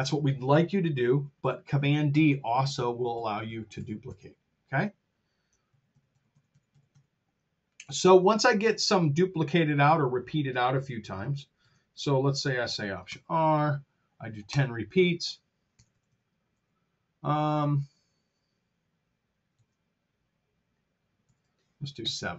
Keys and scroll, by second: 1.7 super+d, 5.6 super+z, 11.5 super+z, 13.0 alt+r, 14.4 Return, 15.7 r, 16.5 t, 19.5 super+z, 21.2 alt+r, 21.9 7.